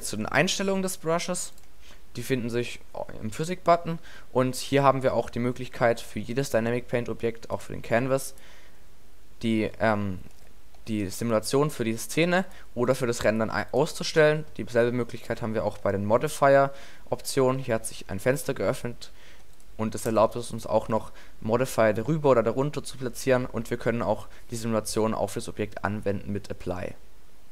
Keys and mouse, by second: 0.1-0.6 middle drag, 3.8-7.5 middle drag, 12.4-14.4 drag, 16.3-17.4 drag, 19.8-22.8 drag, 22.8-27.5 middle drag.